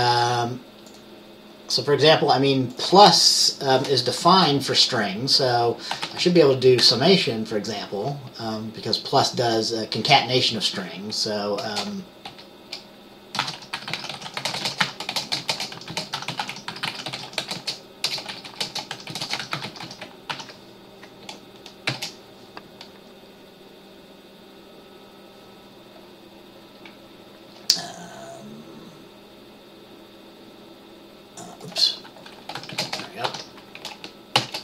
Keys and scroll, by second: 4.4 Return, 6.0-6.9 typing, 11.8-12.4 typing, 13.5-22.5 typing, 32.7 shift+,, 32.8 shift+,, 32.9 space, 33.4 ctrl+s, 34.5 ctrl+b.